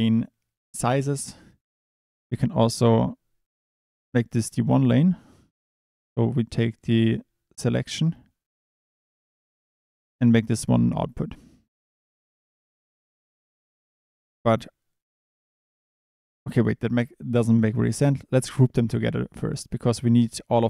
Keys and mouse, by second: 2.9 click, 7.6 click, 11.0 click.